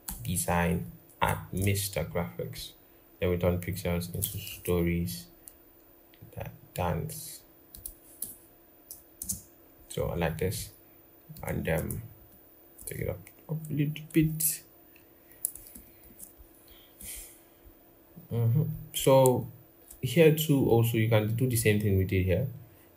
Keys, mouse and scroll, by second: 0.4 Down, 0.9 BackSpace, 1.3 space, 4.2 ctrl+-, 8.0 BackSpace, 9.0 space, 11.9 shift+Up, 15.5 ctrl+-, 15.8 ctrl+-, 17.4-17.9 scroll down 1, 18.5-19.2 scroll up 1.